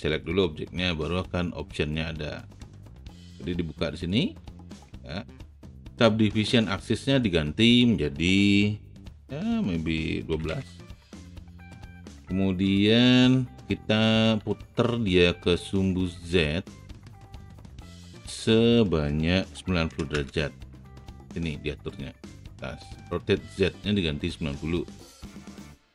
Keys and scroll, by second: 10.3 KP_1, 10.4 KP_2, 10.9 Return, 14.5 e, 19.9 KP_9, 19.9 KP_0, 20.1 Return.